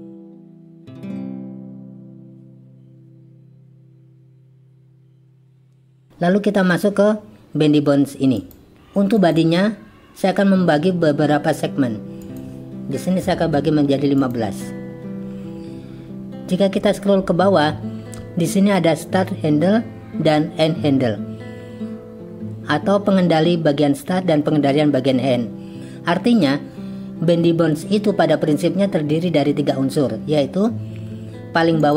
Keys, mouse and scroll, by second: 0.2 click, 0.9-2.6 drag, 3.0 click, 3.5-5.0 drag, 8.4 click, 9.3 click, 12.2-14.2 drag.